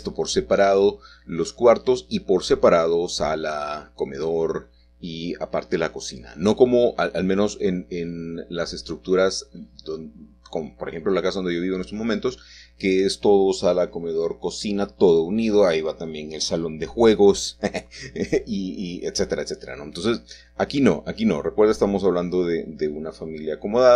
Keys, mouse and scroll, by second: 0.5-1.0 scroll up 1, 1.0-5.9 middle drag, 5.0 shift+click, 6.1 shift+click, 6.6 click, 6.6 x, 6.9 middle click, 7.1 click, 7.2 shift+click, 7.4 ctrl+z, 7.6 shift+click, 7.9 shift+click, 8.1 shift+click, 8.6 shift+click, 8.7 shift+click, 8.8 shift+middle click, 9.0 x, 9.1 click, 9.5-10.0 scroll up 1, 10.1 ctrl+z, 11.1 k, 11.5 Escape, 12.1 k, 12.5 click, 13.3 Escape, 14.1 shift+middle click, 14.7 k, 15.1 click, 16.3 click, 16.8 3, 16.9 click, 17.0 shift+middle click, 17.3 shift+click, 17.9 typing, 17.9-18.9 drag, 19.2 Escape, 19.4 click, 20.0-21.2 scroll down 4, 20.2 middle click, 20.3 click, 20.4 x, 21.2 Tab, 21.2 click, 21.6 Tab, 22.1 Tab, 22.1 click, 22.7 click, 23.1 shift+click, 23.8 scroll up 1, 23.9 shift+middle click.